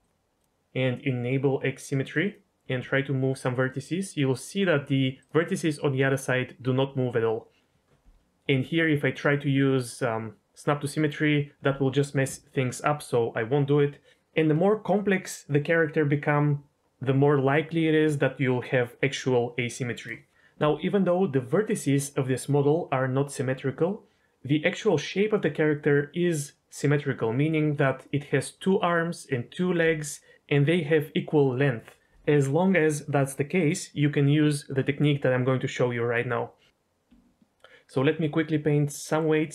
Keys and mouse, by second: 0.4 drag, 2.2 click, 2.7 g, 5.1 right click, 8.2 ctrl+z, 8.2 a, 8.5 a, 9.2-11.3 drag, 37.0 Tab, 39.1 middle click.